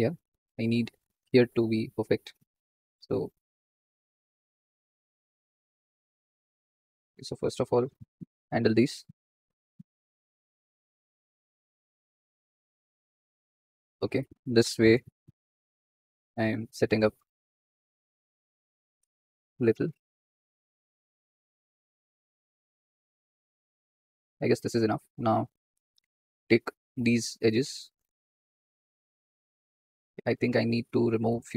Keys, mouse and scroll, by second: 0.6 click, 1.5 click, 2.6 click, 3.2 alt+shift+click, 4.0 2, 4.4 alt+shift+click, 5.5 alt+shift+click, 5.8 alt+shift+click, 6.1 alt+shift+click, 7.3 1, 7.8-9.2 drag, 9.2 g, 13.9 ctrl+click, 14.6 g, 17.1 ctrl+click, 18.0 g, 19.5 ctrl+click, 20.2 g, 21.4 click, 21.9 g, 24.4 click, 26.0 click, 26.7 2, 27.1 alt+shift+click, 27.4 alt+shift+click, 28.1 alt+shift+click, 28.4 alt+shift+click, 28.7 alt+shift+click, 29.1 alt+shift+click, 30.1 click, 30.6 click, 31.1-31.5 alt+shift+drag.